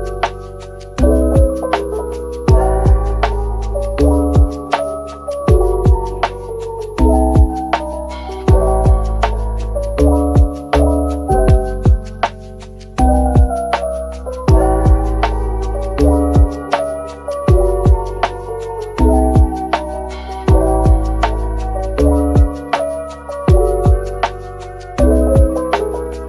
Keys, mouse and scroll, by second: 0.1 typing, 1.1 middle click, 3.3-4.3 typing, 6.4 ctrl+click, 6.8 middle click, 14.1 scroll up 1, 14.5 middle click, 20.1 Tab, 21.2 typing, 22.3 Tab, 22.8 Tab, 23.4 typing, 23.9 ctrl+l.